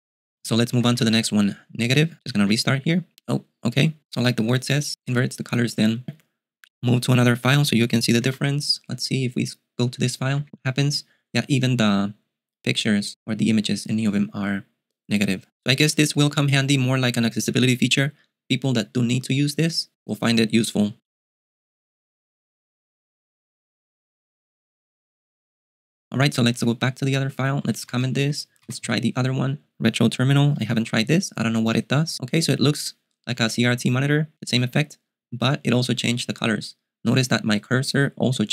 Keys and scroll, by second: 0.1-1.6 typing, 2.6 super+q, 8.5 ctrl+b, 8.6 ctrl+t, 10.2-11.0 typing, 26.8 ctrl+b, 26.9-29.3 typing, 31.0 super+q, 37.8-38.5 typing.